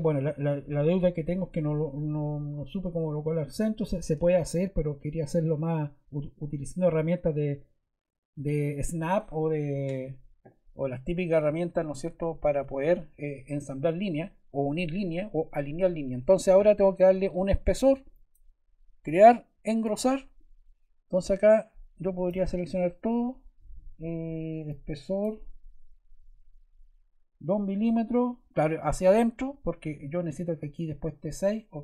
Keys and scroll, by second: 26.1 2.